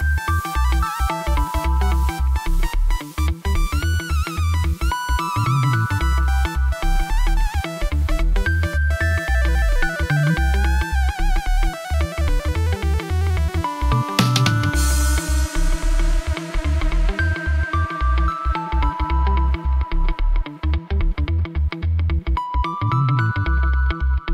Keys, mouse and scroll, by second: 0.3-4.4 drag, 4.7 middle click, 6.0 Tab, 6.5 click, 7.2 g, 7.3 y, 9.8 click, 10.9 click, 11.4 g, 11.5 y, 19.3 click, 19.5 click, 20.6 click, 21.2 Tab, 21.5 middle click, 21.9 click, 22.0 middle click, 22.1 click, 22.3 middle click, 23.0 click, 23.6 click.